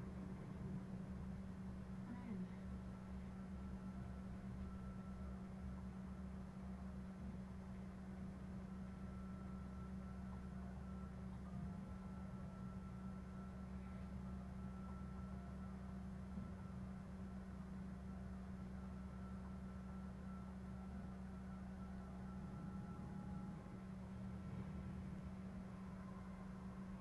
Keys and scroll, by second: 12.1 shift+Down, 13.5 Right, 23.2 Down, 23.8 shift+Down.